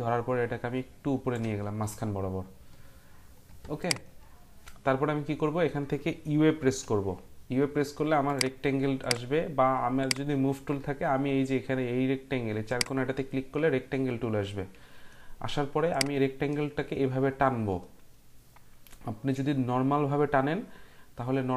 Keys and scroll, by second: 6.6 u.